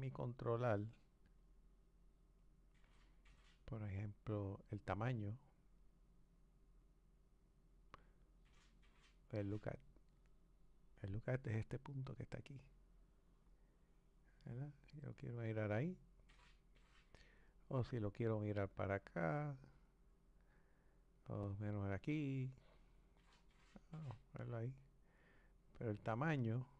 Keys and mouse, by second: 1.9 click, 2.6-5.5 drag, 11.9 Left, 11.9 click, 17.9 click, 21.1 click, 26.1 click.